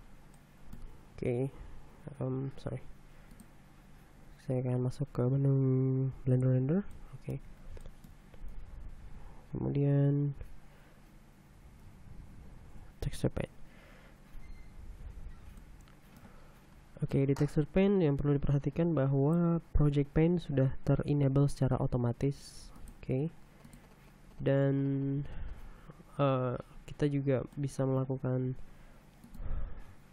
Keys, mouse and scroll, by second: 0.0 click, 0.9 shift+middle click, 1.8 shift+q, 4.0 click, 6.9 click, 7.6 click, 8.1 middle click, 8.5 shift+click, 9.2 shift+t, 12.5 Tab, 16.2 shift+middle click, 16.8 shift+scroll up 1, 17.7-20.2 middle drag, 23.4 middle click, 24.3 middle click, 25.1-26.5 scroll up 8, 27.3 scroll down 2, 28.1 middle click, 29.1 f.